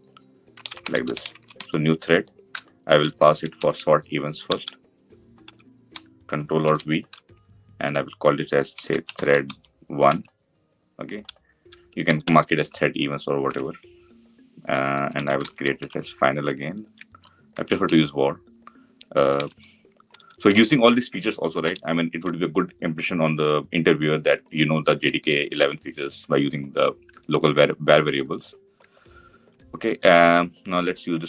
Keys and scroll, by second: 4.4 Return, 6.3 ctrl+alt+v, 19.1 ctrl+d.